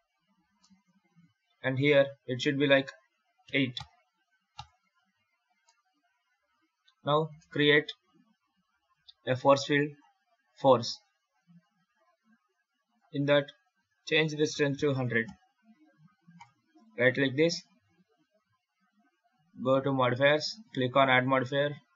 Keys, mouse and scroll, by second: 0.5 middle click, 1.3 ctrl+r, 4.8 Tab, 5.4 scroll up 1, 5.5 middle click, 7.1 shift+a, 12.7 click, 13.5 click, 14.8 KP_0, 16.2 right click, 19.7 click, 20.4 click.